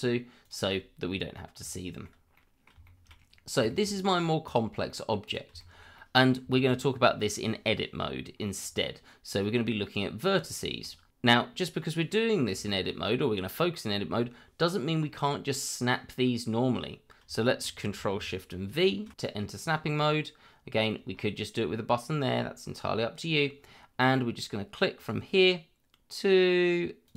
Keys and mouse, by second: 0.4 click, 1.7 shift+middle click, 2.3 middle click, 2.8 shift+middle click, 3.7 shift+middle click, 4.4-4.9 right drag, 4.9 middle drag, 5.2 click, 5.6 shift+middle drag, 5.9-6.3 middle drag, 6.5 shift+middle drag, 9.4 middle click, 10.5 shift+middle drag, 12.9 middle click, 17.4 shift+middle click, 18.7 ctrl+shift+v, 25.0 click, 27.0 click.